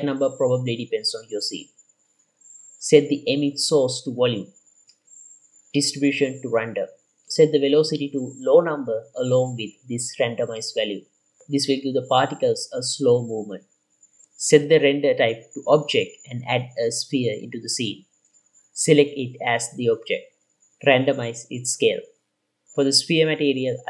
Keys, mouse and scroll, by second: 2.3 click, 13.9-16.1 drag, 16.5 scroll up 2, 16.9-17.3 shift+middle drag, 18.0 click, 22.9 click, 23.4 click.